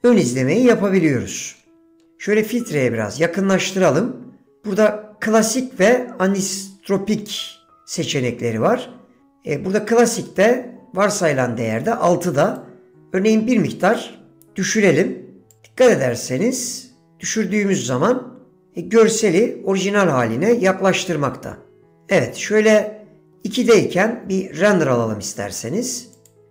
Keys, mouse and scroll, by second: 5.4-8.4 drag, 12.6 click, 14.0 click, 15.6 click, 17.9 click, 22.8 click, 26.4 click.